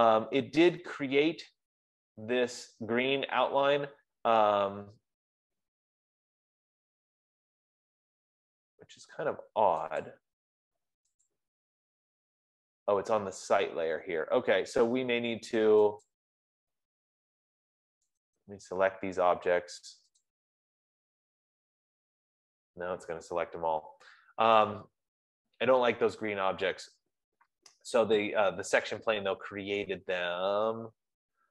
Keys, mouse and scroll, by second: 10.6 click, 11.6 click, 16.6 click, 18.8 right click, 20.7 click, 25.3 Escape.